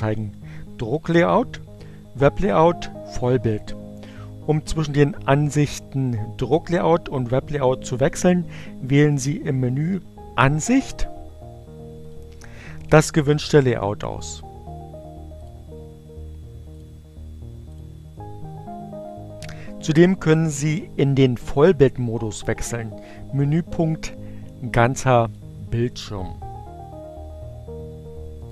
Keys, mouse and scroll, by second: 11.9 click, 15.0 click, 16.6 click, 17.4 click, 25.0 click, 27.1-28.5 drag.